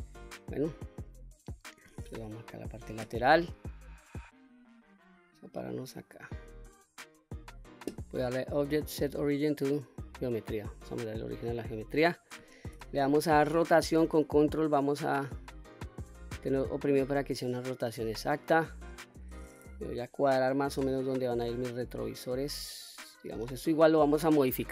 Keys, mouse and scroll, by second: 0.8-1.5 middle drag, 2.2 KP_3, 3.7-5.9 drag, 8.2-10.0 drag, 12.5 r, 17.1 ctrl+click, 18.0-18.4 scroll down 1, 18.4-18.9 middle drag, 19.6 KP_1, 20.2-21.2 scroll up 1, 21.2-21.7 drag, 22.9 click.